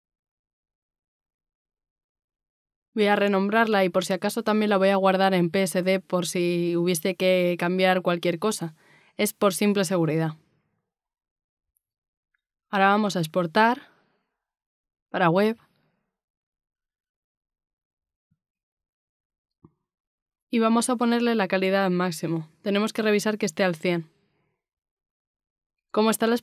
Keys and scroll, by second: 0.1-1.7 typing, 3.6-4.2 typing.